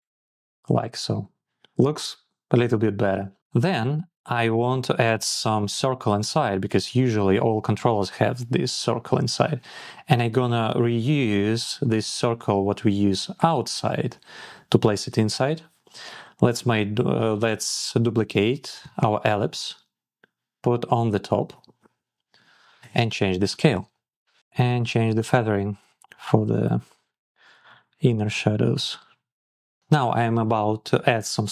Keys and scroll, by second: 18.5 super+d, 27.2 Up, 28.9 shift+Up, 29.6 shift+Down.